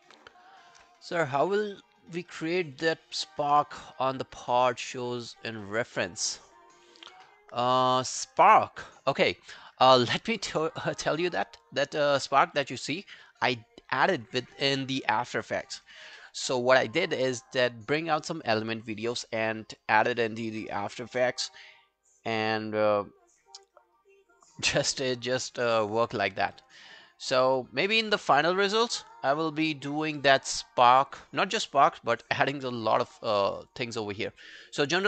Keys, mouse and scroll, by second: 26.9 alt+middle click, 33.2 alt+middle click, 33.5 alt+right click, 33.7 alt+click.